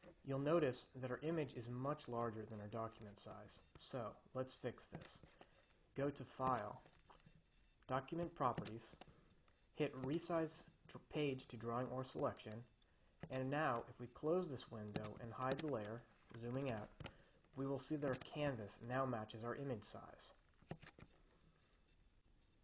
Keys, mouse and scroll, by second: 0.1 click, 5.5 drag, 6.9 click, 9.0 click, 10.5 click, 14.0 click, 15.5-16.5 drag, 16.7 -, 18.7 click, 21.0 click.